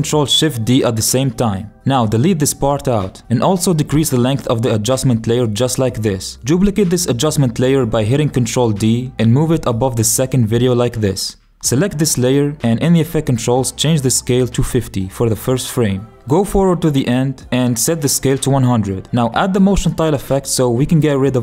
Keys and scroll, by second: 7.8 ctrl+d.